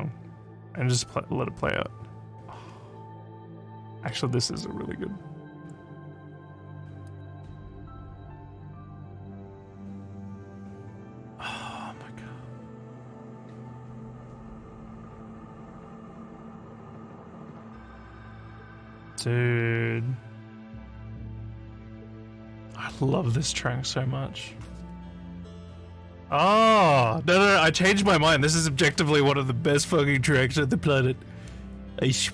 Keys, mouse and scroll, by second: 7.1 click.